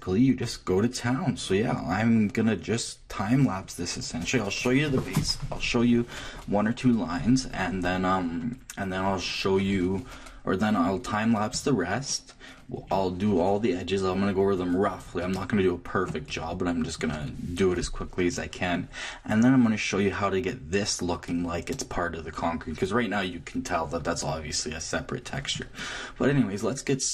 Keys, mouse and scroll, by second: 0.8-1.2 scroll up 1, 1.2-1.7 scroll down 1, 1.7-7.0 middle drag, 11.5 Left, 12.1-14.7 middle drag, 15.2-19.2 middle drag, 16.0 click, 19.4-27.1 middle drag.